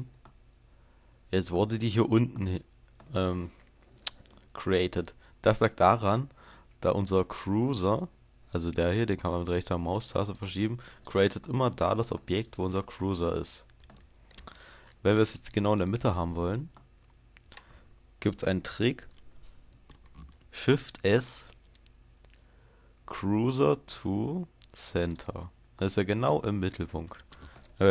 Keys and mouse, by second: 0.2-5.6 middle drag, 9.0-21.0 drag, 21.0 shift+s.